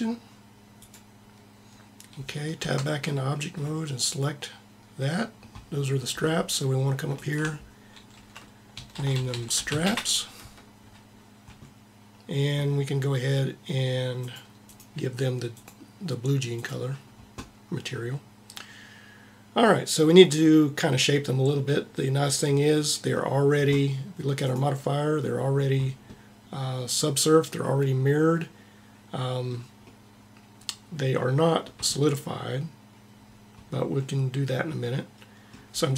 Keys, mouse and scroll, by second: 2.7 Tab, 7.2-8.8 drag, 14.3-15.6 drag, 24.5-26.3 drag, 27.6-29.5 middle drag, 29.8 middle click.